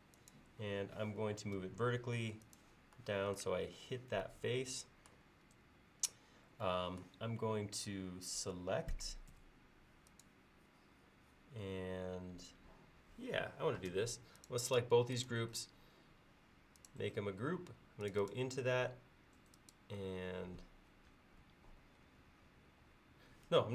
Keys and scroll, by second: 9.4 space.